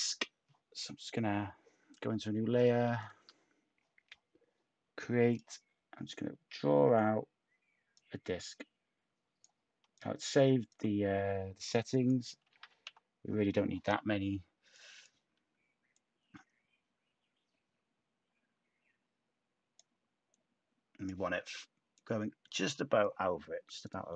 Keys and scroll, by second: 12.1-13.0 typing.